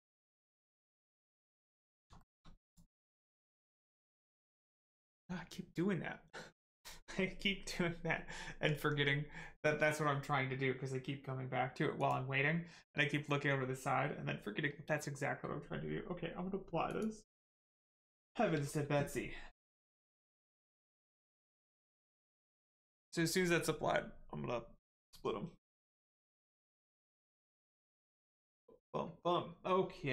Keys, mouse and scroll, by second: 1.4 click, 1.8 middle click, 2.1 shift+middle click, 2.6 click, 2.6 click, 3.0 middle click, 3.3 scroll down 1, 3.6 Tab, 3.8 middle click, 16.8 click, 21.8 click.